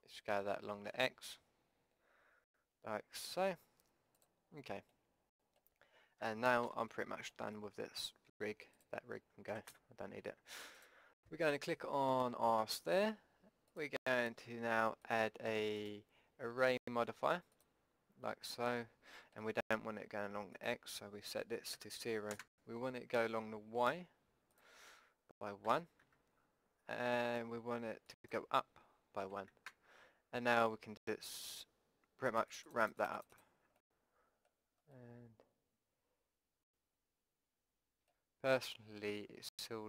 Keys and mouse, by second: 5.1-6.2 middle drag, 6.2 KP_5, 6.7 z, 8.4 Tab, 9.5 Delete, 10.8-12.8 drag, 13.8-17.9 drag, 18.8-20.5 middle drag, 20.5-22.6 drag, 24.6-26.6 drag, 28.2-30.1 drag, 32.3-35.3 drag, 35.3 middle click, 37.1-38.1 middle drag, 38.6 middle click.